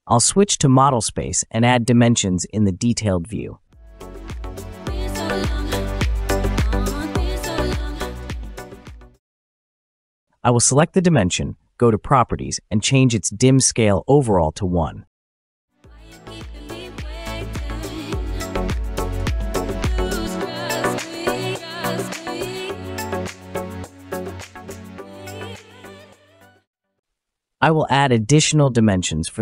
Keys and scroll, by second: 17.0 typing, 18.1 Return, 22.4 Escape.